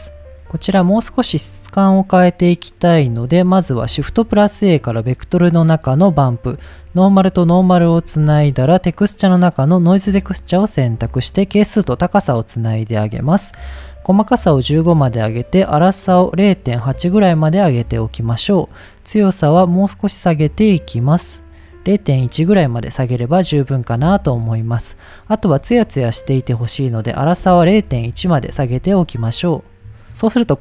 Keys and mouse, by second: 0.7 shift+middle click, 2.6 middle click, 3.1 click, 3.8 shift+a, 6.4-7.1 drag, 7.4 middle click, 8.0 shift+a, 11.4-12.2 drag, 12.5 click, 13.1 middle click, 14.1 click, 14.8-16.9 drag, 17.4 middle click, 18.3-22.3 drag, 22.7 shift+middle click, 23.7 shift+middle click, 25.8 shift+middle click, 27.1-29.3 drag, 30.0 middle click.